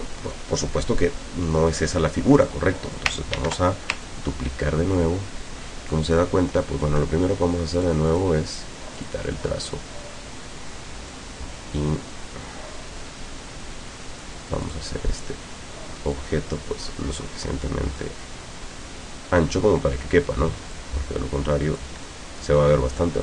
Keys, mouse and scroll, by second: 2.4 click, 3.4 ctrl+d, 4.1-7.1 ctrl+drag, 7.8 click, 9.0 click, 11.2-14.5 drag, 14.7 click, 16.2-19.8 drag, 20.8-22.0 drag.